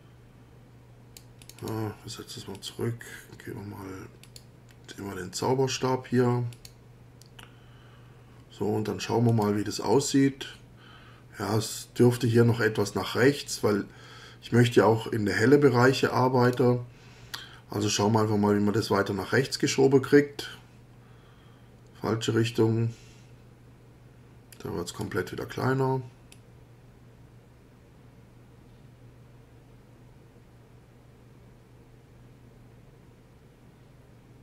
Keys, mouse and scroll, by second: 1.4 click, 2.5 click, 4.2 click, 6.5 click, 9.3 click, 16.5 click, 18.8-25.2 drag, 26.3-34.4 drag.